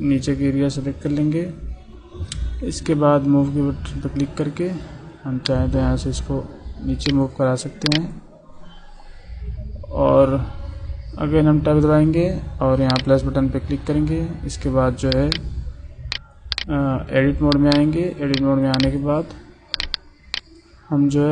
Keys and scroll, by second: 11.0 Tab, 16.9 Tab.